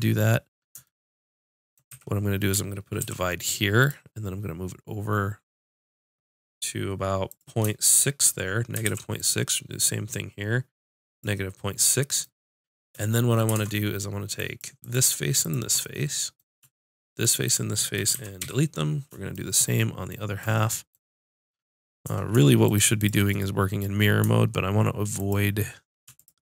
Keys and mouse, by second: 1.9 a, 3.0 ctrl+r, 4.7 click, 7.4 click, 8.9 ctrl+r, 11.7-13.2 middle drag, 13.8 ctrl+Tab, 14.8-15.9 drag, 15.9 click, 18.2 x, 22.7 click.